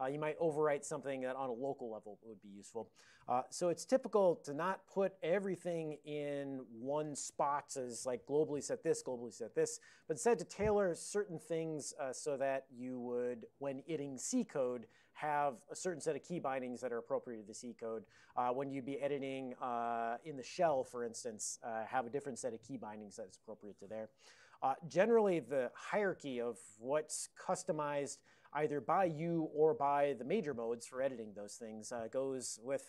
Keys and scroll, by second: 4.0 Tab.